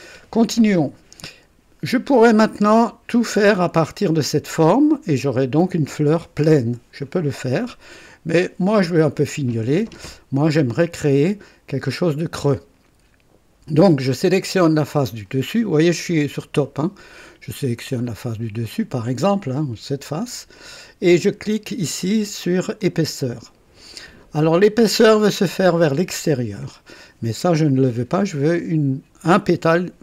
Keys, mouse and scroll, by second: 1.8 scroll down 1, 2.3-3.5 drag, 8.0-9.0 drag, 16.3 click, 17.9 click, 18.7 click, 22.7 click, 24.4-25.8 drag.